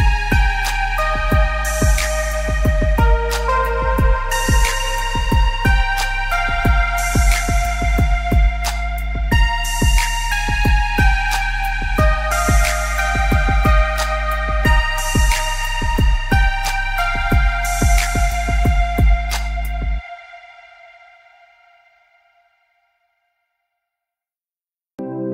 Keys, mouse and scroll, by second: 0.8 click, 1.8 ctrl+z, 2.1 Escape, 2.4 scroll up 1, 2.8 click, 3.2 scroll down 1, 3.3 Escape, 3.9 click, 5.2 Escape, 5.3-5.8 scroll down 2, 5.6 click, 6.0-6.4 alt+scroll up 2, 6.4 click, 8.9 click, 9.1 scroll up 1, 9.3 click, 10.0 ctrl+z, 10.1 scroll up 1, 10.2 click, 10.4 scroll down 1, 10.7 click, 11.0-11.4 alt+scroll down 4, 11.6 alt+scroll up 2, 11.9 click, 13.2 z, 13.5 alt+scroll up 1, 13.7 click, 13.9-14.3 alt+scroll down 2, 15.0 click, 15.5 click, 16.0 z, 16.2 click, 17.4 space, 17.7 click, 20.8 Escape, 20.9 click, 21.3 Escape, 21.5 click, 21.8 Escape, 22.0 click, 22.9 ctrl+z, 23.2 click, 23.5 click, 24.0 Escape, 24.1 click, 24.5 Escape, 24.8 space, 25.0 click.